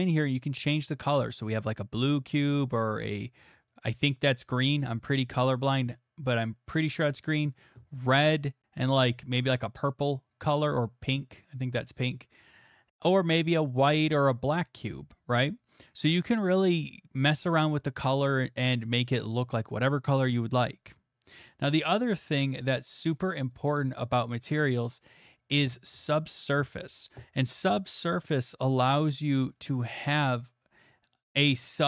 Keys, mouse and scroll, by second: 5.5 click, 13.8 click, 15.9 click, 16.5 click, 21.7 click, 23.5 click, 24.0 click, 31.2 click.